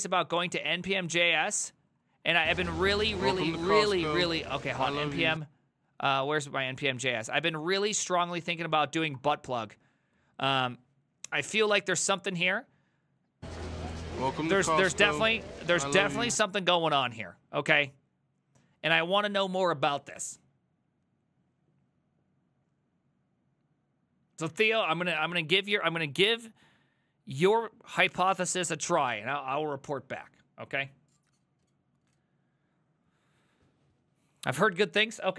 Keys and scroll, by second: 0.0-0.5 typing, 1.1 Down, 1.3 Down, 1.4 Down, 1.9 Down, 2.1 Down, 2.2 Down, 2.6 ctrl+shift+Left, 3.1 ctrl+shift+Left, 3.3 ctrl+shift+Left, 3.5 ctrl+shift+Left, 3.6 ctrl+shift+Left, 3.8 ctrl+shift+Left, 4.0 ctrl+shift+Left, 4.1 ctrl+shift+Left, 4.3 ctrl+shift+Left, 4.5 ctrl+shift+Left, 4.5-5.5 typing, 6.5 Down, 6.7 Down, 6.8 Down, 7.0 Down, 7.2 Down, 7.2 Down, 7.4 Down, 7.7 Down, 8.0 ctrl+shift+Left, 8.2-9.2 typing.